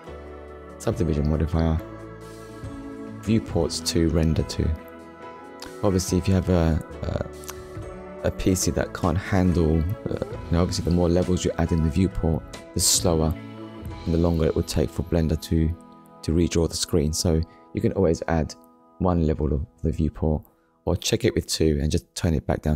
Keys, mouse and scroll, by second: 1.2 click, 3.4 click, 4.9 middle click, 6.1 middle click, 6.7 click, 7.2 shift+middle click, 8.3 middle click, 10.0 click, 11.5 click, 12.8 click, 14.2 click, 15.3 middle click, 16.9 right click, 17.6 click, 18.3 click, 18.6 middle click, 19.1-19.5 scroll down 2, 19.6 shift+middle click, 19.9 middle click, 20.9 shift+middle click, 21.6 click.